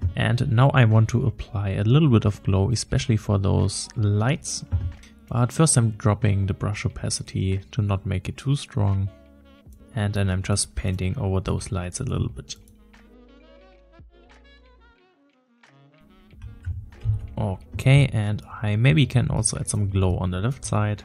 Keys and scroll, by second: 17.1 ctrl+z.